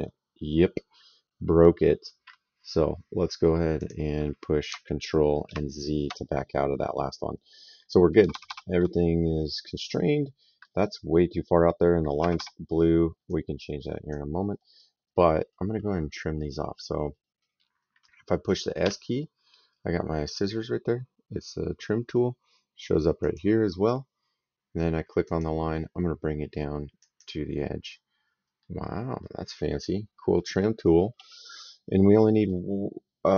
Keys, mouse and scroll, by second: 3.6 click, 5.3 ctrl+z, 8.0 Escape, 9.8 middle click, 12.0 Escape, 13.1 click, 14.4 middle click, 16.9 middle click, 18.6 s, 23.0 click, 25.0 click, 26.8 click, 28.4 middle click, 29.7 middle click, 32.0 middle click.